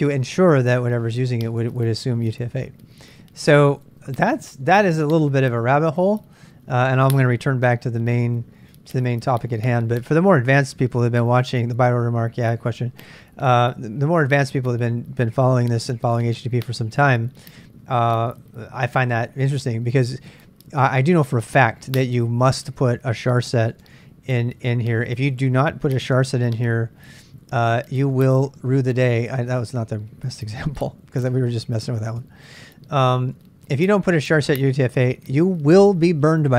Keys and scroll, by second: 23.4-35.8 typing, 32.6 Return.